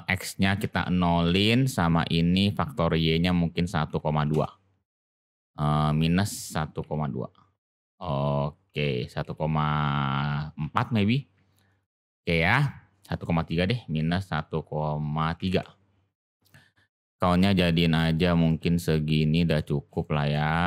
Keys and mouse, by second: 0.1-1.6 drag, 2.8-5.1 drag, 6.0-11.3 drag, 11.7 click, 13.1-16.2 drag, 17.2 click, 17.5 click, 17.7 click, 17.9 click, 18.0 click, 18.5-19.5 middle drag, 20.0-20.3 shift+middle drag.